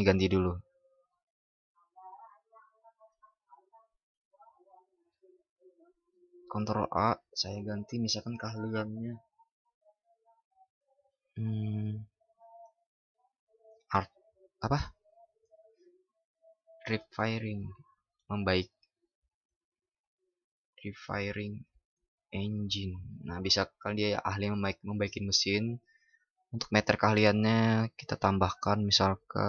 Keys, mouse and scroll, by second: 6.2 ctrl+shift+@.